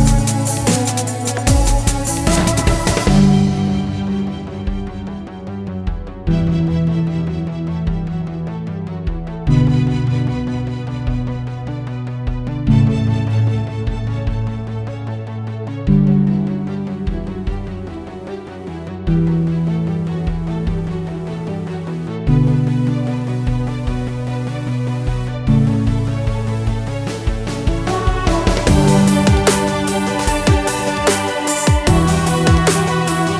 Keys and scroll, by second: 13.4-14.3 typing, 14.4 Return, 29.6 ctrl+w.